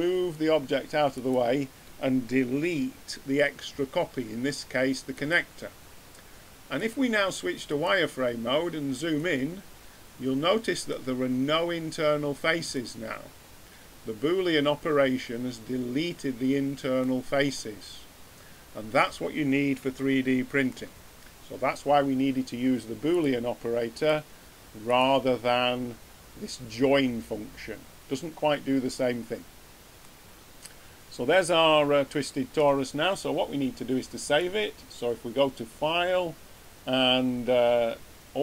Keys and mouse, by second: 3.6 x, 8.6-9.6 middle drag, 10.0 middle click, 12.7 middle drag, 14.1-14.4 middle drag, 23.1-30.0 middle drag.